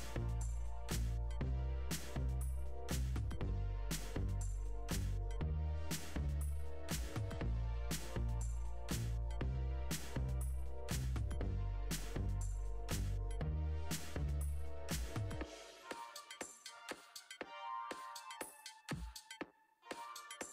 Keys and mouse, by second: 2.0 shift+drag, 5.3 click, 8.6 drag, 9.2 r, 9.2 y, 10.8-12.5 drag, 12.5 r, 12.6 y, 13.5 r, 13.5 y, 16.0 ctrl+z, 16.2 ctrl+z, 19.3-19.7 drag, 19.7 r, 19.8 y.